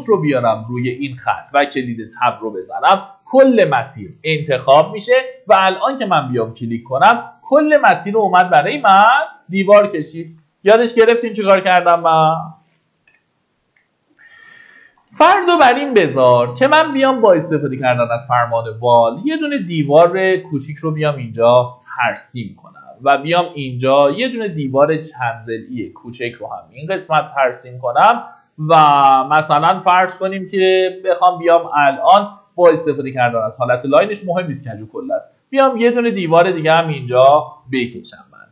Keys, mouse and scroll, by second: 1.2 Tab, 5.1 click, 7.5 Escape, 8.1-10.1 scroll down 1, 10.1 Escape, 10.9-12.1 drag, 12.8 Delete, 13.4 scroll up 1, 14.2 middle click, 14.5-15.4 typing, 16.5 scroll up 1, 17.5 click, 21.5-22.1 scroll up 1, 23.4 click, 30.5 Escape, 31.1-32.1 middle drag, 32.8 click, 37.8 Escape.